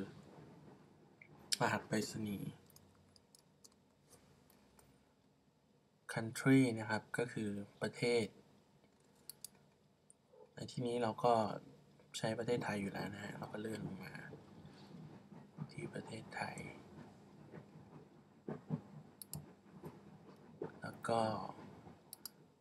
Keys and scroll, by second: 2.7-3.7 typing.